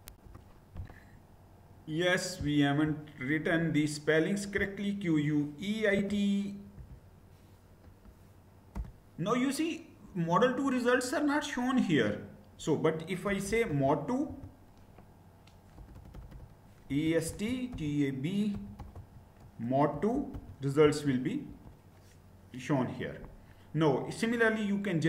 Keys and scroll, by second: 5.6 typing, 6.4 Right, 7.5 Delete, 8.5 Return, 12.7-13.9 typing, 15.4-20.6 typing, 21.1 Return.